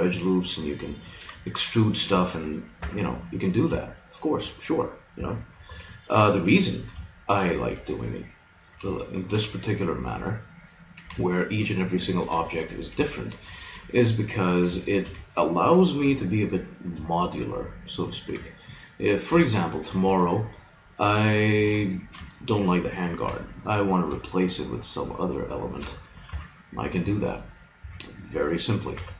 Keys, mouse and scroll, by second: 0.9-2.8 drag, 2.8 KP_Decimal, 2.9 click, 5.2 a, 5.7 b, 7.1-8.2 drag, 16.1 g, 17.3 click, 23.3 g, 25.6 click, 26.3 KP_Decimal, 27.8 a, 28.9 b.